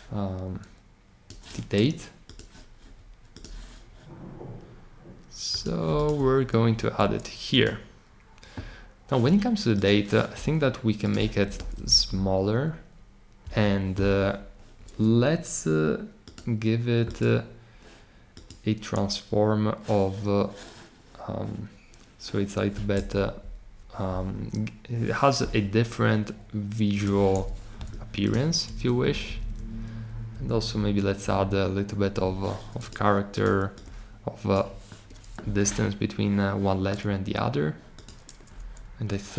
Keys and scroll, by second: 11.7 Down, 13.4 Up, 23.1 Down, 28.9 Up, 29.1 Up, 29.2 Up, 29.5 Up, 30.3 Up, 31.2 Up.